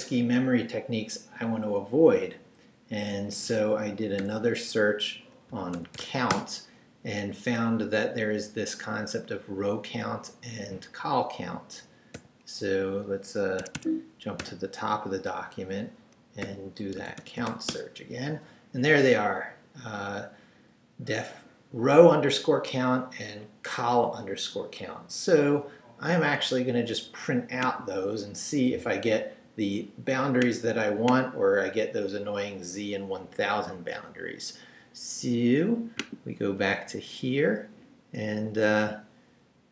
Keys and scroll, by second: 4.2 /, 5.5 c, 6.0 n, 6.3 Return, 12.2 n, 13.6 Escape, 14.4 g, 16.4-18.0 typing, 36.8 Down, 38.0 Up, 38.7 Left.